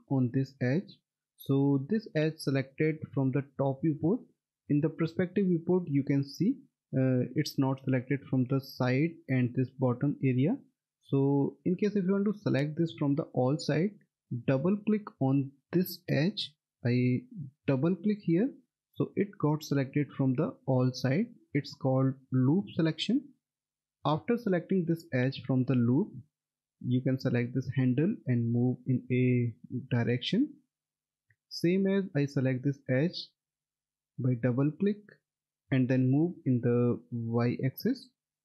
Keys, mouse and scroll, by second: 4.7 alt+w, 5.3 alt+middle click, 10.5 alt+middle click, 14.3 alt+w, 16.4 click, 17.9 double click, 19.2 middle click, 25.1 middle click, 26.9 click, 33.3 click, 33.6 double click, 35.9 click.